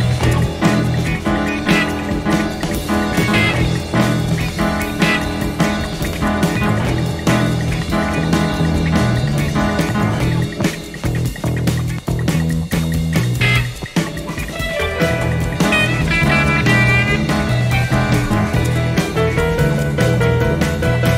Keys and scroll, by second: 1.6 typing, 2.7-3.2 typing, 4.2 ctrl+d, 7.1 typing, 8.9 space, 16.1 F1, 16.5-17.1 typing, 18.5 ctrl+d, 20.9 Page_Down.